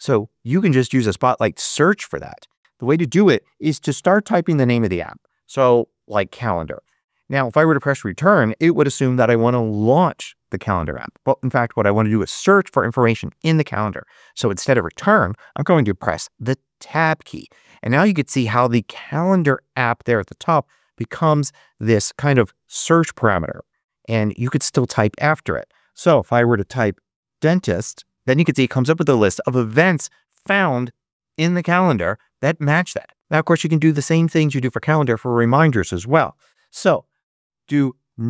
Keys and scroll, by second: 3.3-5.0 typing, 16.7 Tab, 26.1-28.3 typing, 36.2 super+space, 37.4-38.2 typing.